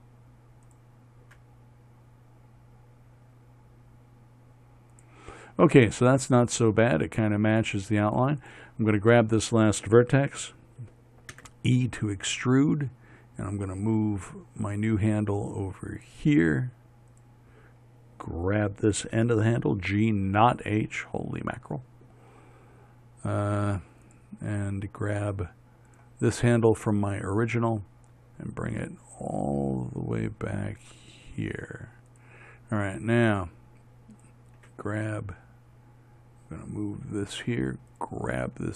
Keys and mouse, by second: 1.1-3.2 drag, 1.7 g, 8.9-11.8 drag, 11.8 e, 13.9-15.0 drag, 17.6-19.6 drag, 19.6 g, 24.5-28.0 drag, 28.0 g, 35.1 g.